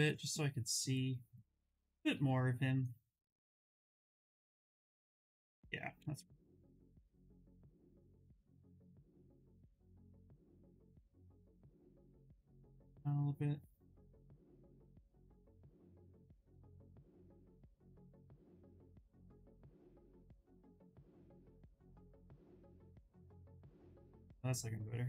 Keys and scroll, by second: 5.4 Escape, 10.5 ctrl+z, 10.9 space, 16.3 ctrl+z, 16.6 ctrl+z, 17.0 ctrl+z, 17.4 ctrl+z, 17.8 ctrl+z, 18.1 ctrl+z.